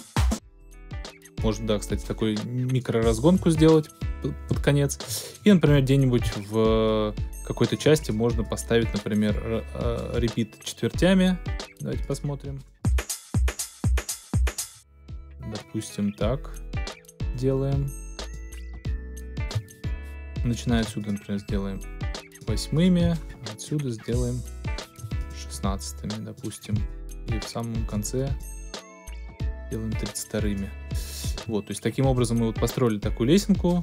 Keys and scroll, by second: 0.3 alt+super+space, 1.1 space, 12.8 space, 14.6 space.